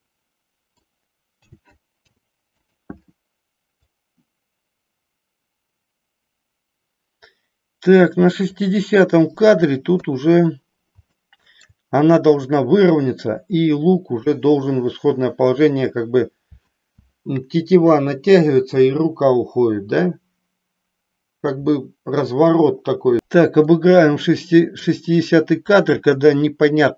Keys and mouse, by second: 1.4 a, 1.9 i, 3.9-8.7 drag, 9.9 KP_3, 11.3 middle click, 23.8-24.8 middle drag.